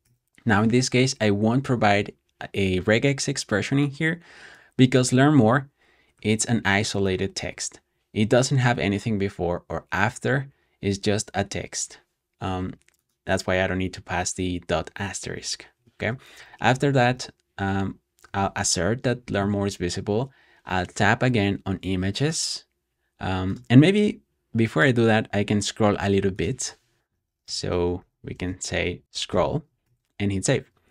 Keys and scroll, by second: 0.0 super+s, 15.6 Escape, 16.0-17.4 typing, 19.7-20.4 typing, 26.7-29.5 typing, 29.7 super+s.